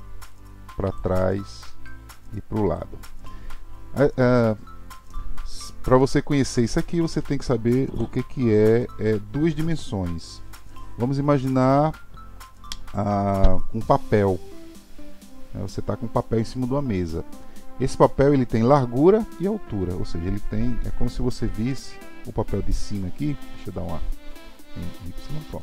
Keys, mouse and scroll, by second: 0.3 click, 1.9 click, 21.5 KP_7, 22.7 scroll up 5, 23.2-24.5 scroll down 1, 24.5 s.